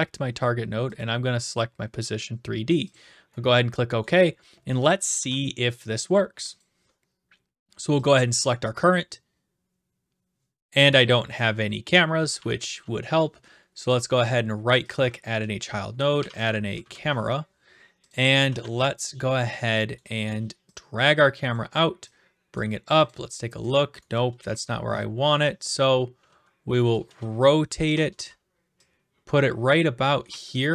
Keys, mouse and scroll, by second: 1.0 click, 2.9 click, 3.4-4.0 typing, 4.0 right click, 5.1 ctrl+s, 6.6 click, 8.8 click, 11.0 click, 11.5-12.9 typing, 11.9 right click, 13.2 right click, 14.0 click, 14.2 right click, 15.9-16.8 typing, 18.1 click, 18.2-19.8 typing, 19.9 right click, 21.5 click, 22.6 click, 23.1 click, 23.7 click, 23.9-25.8 typing, 25.8 right click, 27.9 ctrl+click, 28.1 w, 29.7 click, 30.2 e.